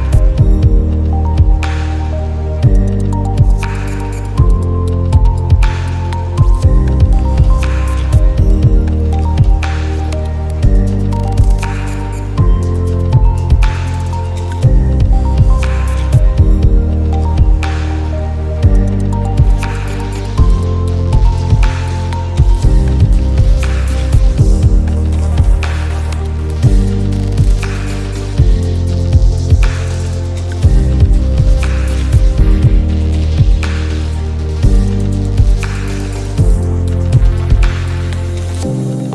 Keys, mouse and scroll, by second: 0.6 i, 1.1 click, 3.9 click, 5.2-12.8 drag, 14.5 space, 14.7 click, 14.7 space, 15.4-18.8 drag, 16.4 click, 18.9 space, 19.0 click, 19.1 space, 19.3 alt+scroll up 1, 20.0 click, 20.0 click, 27.1 click, 30.2 alt+scroll down 1, 31.0 click, 31.3 space, 33.4 alt+scroll up 1, 34.1 alt+scroll up 1, 34.9-39.1 drag.